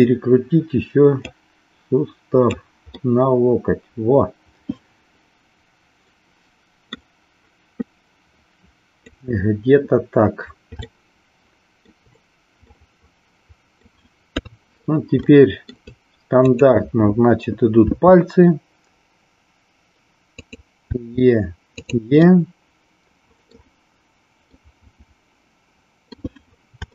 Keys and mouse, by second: 1.3-2.6 drag, 2.9-6.9 middle drag, 7.8-9.0 drag, 10.9 shift+middle click, 12.7-13.9 middle drag, 14.3 KP_3, 15.3 shift+middle click, 16.3 click, 17.9 e, 20.8 e, 22.1-23.6 middle drag, 24.4-26.2 middle drag.